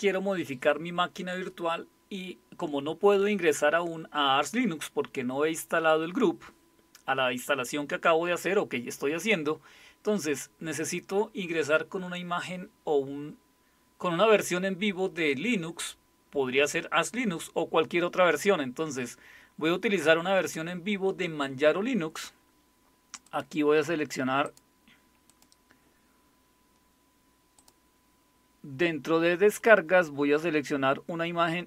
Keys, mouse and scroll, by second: 23.2 click, 24.4 click, 25.3 click, 27.6 click.